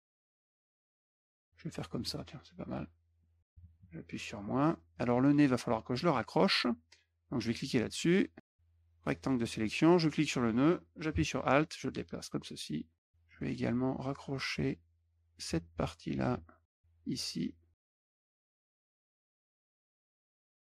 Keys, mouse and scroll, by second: 0.0 shift+click, 0.1 click, 0.5 middle click, 0.8-1.8 drag, 2.1 click, 2.5 click, 3.1 middle click, 4.3 middle click, 4.9 middle click, 5.1 middle click, 5.2 middle click, 5.5 middle click, 6.0 middle click, 7.9 click, 8.4 click, 9.9-12.3 drag, 13.2 middle click, 13.4 middle click, 14.3-15.4 drag, 15.9 shift+click, 16.6-17.8 drag, 17.8 click, 17.9 middle click, 18.1 click, 18.3 click, 18.7 middle click, 18.9 middle click, 18.9 middle click, 19.1 middle click, 19.5 click, 19.7 click, 19.9 click, 20.1 click, 20.4 click.